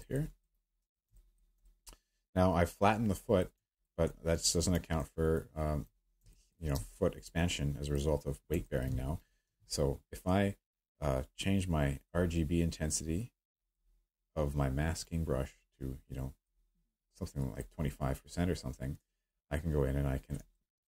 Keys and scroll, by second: 6.7-7.9 space.